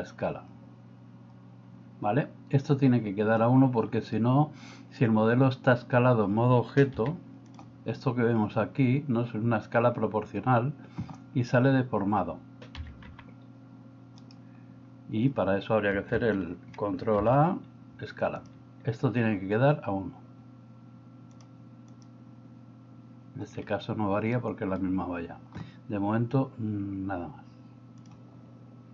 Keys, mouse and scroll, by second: 7.0 s, 12.7 s, 17.3 ctrl+a, 21.3 click, 24.4 middle click.